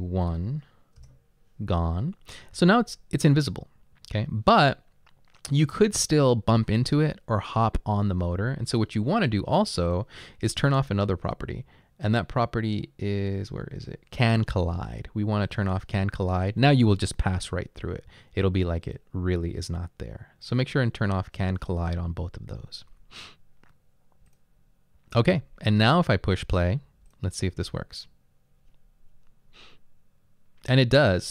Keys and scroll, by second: 0.8 1, 1.0 Return.